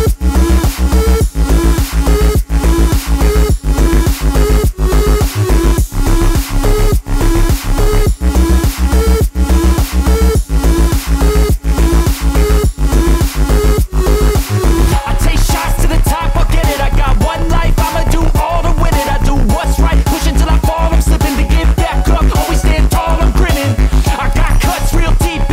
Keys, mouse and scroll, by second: 2.2 middle drag, 3.6-4.2 drag, 4.4 middle click, 4.6 shift+middle drag, 6.0 click, 6.4 middle click, 7.5-10.5 drag, 11.4 click, 12.6 shift+Left, 13.1 click, 14.5 shift+Right, 15.3-18.8 drag, 19.2 click, 19.7 KP_0, 20.5 click, 21.3 shift+Left, 21.5 space, 23.0 space, 23.2 click, 23.9 Delete, 24.8 shift+a.